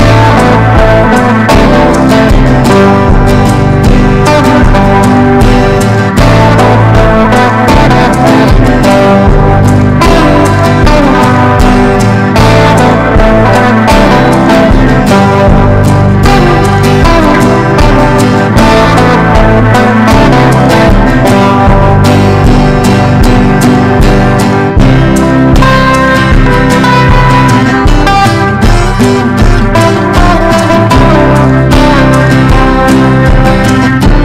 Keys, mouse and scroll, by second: 0.2-2.0 drag, 3.5 Right, 4.0-8.0 typing, 8.8 click, 10.1 right click, 10.4 click, 10.7 right click, 11.0 click, 11.3 right click, 11.7 click, 12.9 ctrl+e, 13.3 ctrl+b, 13.9 click, 14.6 Return, 15.9-17.8 typing, 18.3 click, 21.3-34.2 typing, 28.9 Return.